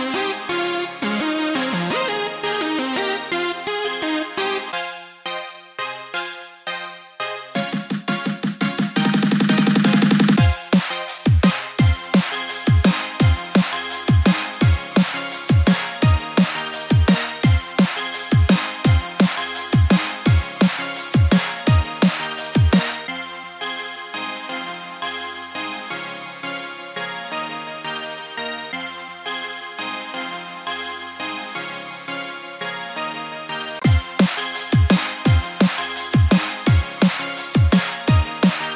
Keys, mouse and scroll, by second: 0.3 shift+middle click, 0.9 shift+middle click, 1.1 Tab, 1.3-1.7 scroll up 2, 2.3 click, 2.6 ctrl+r, 4.5-4.9 scroll up 1, 5.1 scroll up 1, 5.3 alt+click, 5.6 x, 6.3 scroll down 1, 6.6 shift+middle click, 7.0 shift+middle click, 7.1-7.5 scroll up 3, 7.5 click, 7.9 shift+click, 8.4 e, 10.4 click, 10.8 shift+click, 11.3 e, 13.8 click, 14.3 g, 16.4 click, 16.7 g, 18.3 click, 18.6 g, 20.7 click, 21.0 g, 22.7 click, 23.0 g, 25.1 click, 25.4 g, 27.6 click, 27.9 g, 29.3 click, 29.5 g, 31.6-32.1 scroll down 5, 32.1 middle click, 32.5 middle click, 32.8 middle click, 32.8-33.3 scroll up 1, 33.3 scroll up 2, 33.4 scroll down 1, 33.7 middle click, 35.6 middle click, 36.2-36.9 scroll up 5, 36.9 middle click, 37.0 middle click, 37.1-37.6 scroll up 2, 37.7 alt+click, 38.1 scroll down 2, 38.4 c.